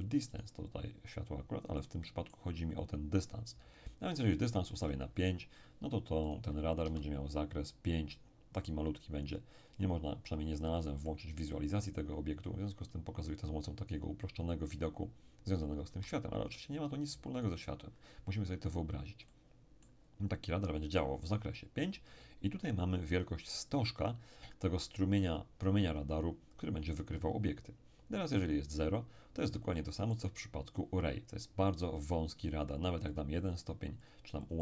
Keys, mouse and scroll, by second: 0.3 right click, 1.7-3.3 middle drag, 4.3 click, 4.7 5, 6.3 right click, 6.8 s, 9.6 click, 15.9 x, 16.4-18.4 drag, 17.4 right click, 19.3-20.8 middle drag, 29.7-31.1 middle drag, 33.1-34.6 drag.